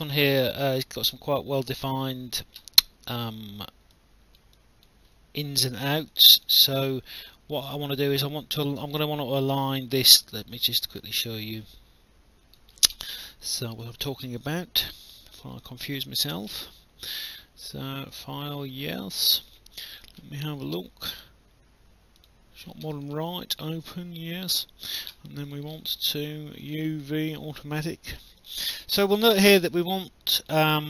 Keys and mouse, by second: 0.3 alt+click, 3.9 alt+click, 6.1 alt+click, 6.7 alt+middle click, 7.3 alt+click, 9.6 click, 10.0 alt+middle click, 10.3 alt+click, 11.1 right click, 13.7 click, 15.9 click, 18.1 click, 19.5 click, 22.2 click, 23.5 click, 24.6 alt+click, 26.6 click, 30.4 click.